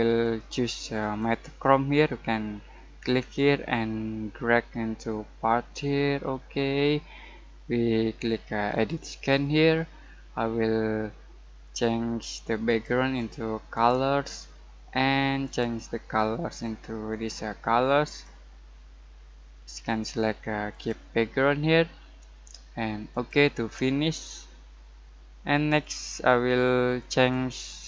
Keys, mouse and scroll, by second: 0.2-8.6 drag, 0.5 typing, 11.7 typing, 12.6 click, 13.9-14.8 typing, 20.7 click, 23.1 click, 27.1 click.